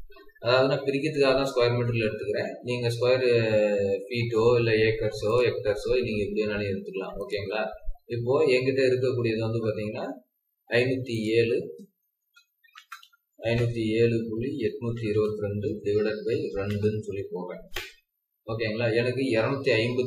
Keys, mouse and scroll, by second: 8.8 scroll down 1, 9.5 scroll up 1, 10.2-10.9 typing, 12.3-13.2 typing, 14.4-16.6 typing, 17.7 Return.